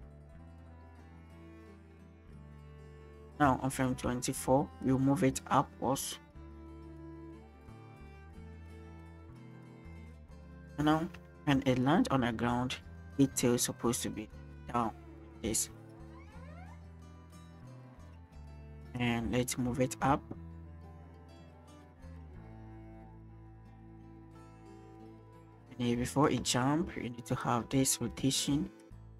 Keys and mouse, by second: 3.6-4.0 shift+drag, 4.8 click, 7.4-10.7 drag, 7.7-10.7 right drag, 11.3 shift+drag, 11.6 click, 13.2 click, 15.9 middle click, 16.7-20.1 drag, 22.4 middle click, 22.9-26.3 drag, 27.4 click.